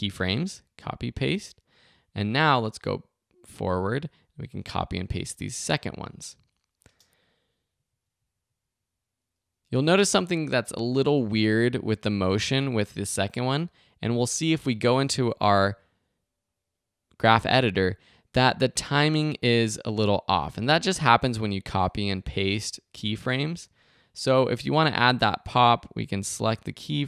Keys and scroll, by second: 0.3 super+c, 0.9 super+v, 5.1 super+c, 5.4 super+v, 6.8 space, 11.1 space.